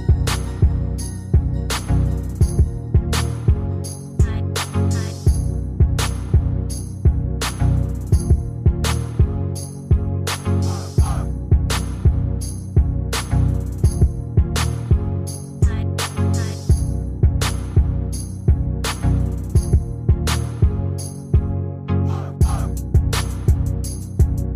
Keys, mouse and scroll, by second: 11.0 Escape, 12.8-14.0 ctrl+scroll down 1, 15.1 ctrl+scroll down 1, 16.3-17.1 ctrl+scroll down 1, 23.6 Return.